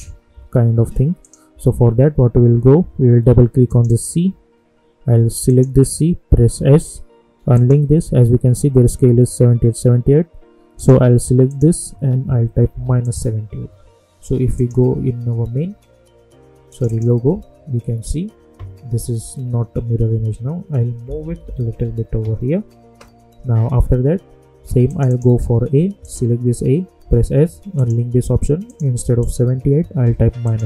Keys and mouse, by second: 1.2 click, 3.6 click, 6.5 s, 7.5 click, 10.7 click, 12.6 click, 13.0 click, 16.9 click, 21.0 Left, 24.8 click, 27.0 s, 27.7 click, 30.0 -, 30.4 click.